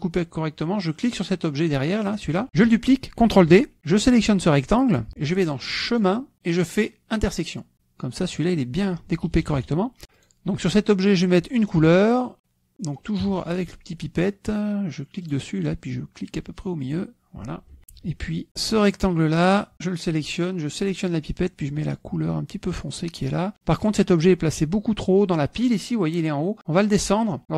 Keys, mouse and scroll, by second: 0.3 click, 1.9 click, 2.4-3.3 drag, 3.4 ctrl+z, 4.2 click, 5.4 shift+click, 6.4 click, 7.8 click, 8.4 click, 9.2 click, 10.4 drag, 11.0 click, 12.7 KP_Subtract, 13.1 click, 14.1 KP_Subtract, 16.1 click, 17.7 click, 17.8 F1, 17.9 click, 18.4 click, 19.1 click, 19.8 click, 21.8 click, 23.5 click, 24.6 click.